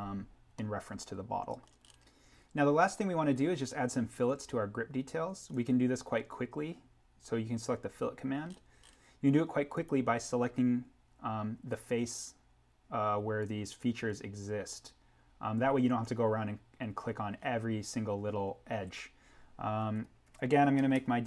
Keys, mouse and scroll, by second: 0.5 middle click, 0.9 scroll, 5.4 scroll down 1, 5.5 click, 8.4-9.7 scroll up 1, 9.7 click, 16.9-19.1 scroll down 1, 19.9-20.2 scroll down 1, 20.9 Tab.